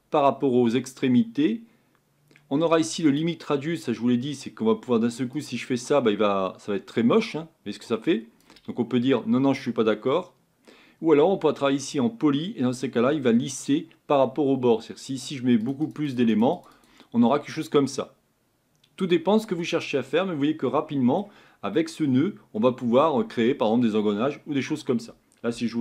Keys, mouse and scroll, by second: 3.1 click, 5.6-9.6 drag, 11.8 click, 15.7-17.3 drag, 17.3-19.9 middle drag, 19.9-20.4 scroll down 2, 20.4-25.8 middle drag.